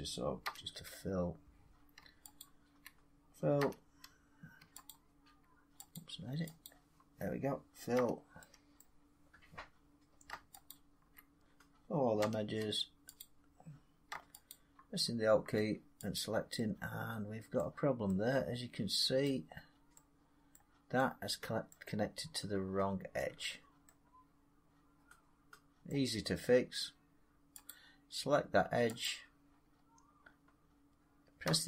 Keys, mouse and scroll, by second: 0.3 f, 2.3 alt+click, 3.5 f, 6.5 alt+click, 7.8 f, 8.7 middle click, 10.6 alt+click, 12.1 f, 13.1 click, 14.4 alt+click, 16.0 click, 17.4 middle click, 19.1 middle click, 19.4 middle click, 19.4 middle click, 19.5 middle click, 19.6 middle click, 19.8 scroll, 20.4 middle click, 20.5 scroll, 21.1 scroll, 21.6 middle click, 23.1 middle click, 23.4 middle click, 25.1 scroll, 25.7 middle click, 27.5 click, 28.9 click, 29.5 middle click, 29.6 middle click, 31.3 x.